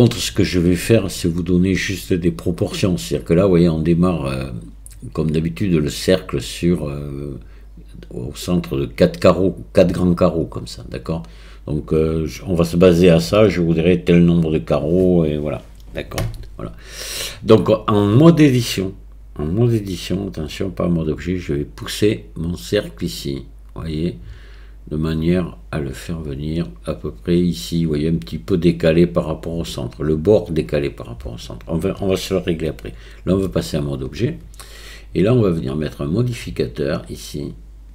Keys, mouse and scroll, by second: 20.5-33.5 drag, 33.5 Tab, 35.9 click, 36.9-37.9 drag.